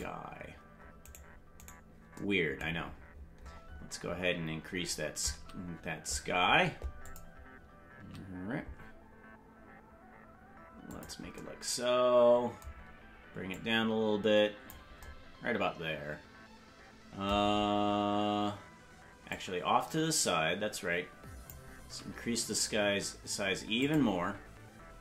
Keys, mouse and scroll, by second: 0.0 click, 0.0 scroll down 10, 1.1 right click, 1.7 right click, 2.8-4.5 scroll down 27, 4.9 scroll down 2, 5.3 s, 13.5-14.7 drag, 17.8-18.2 scroll down 4, 19.3-21.5 drag, 21.8 s.